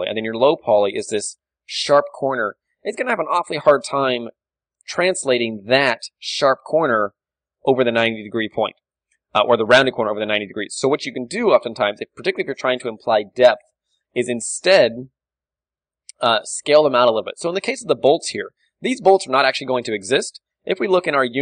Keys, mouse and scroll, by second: 4.6 d, 6.4 d, 6.5-9.5 drag, 8.0-9.9 right drag, 12.9-16.5 middle drag, 16.8-18.0 drag, 17.7-20.2 middle drag.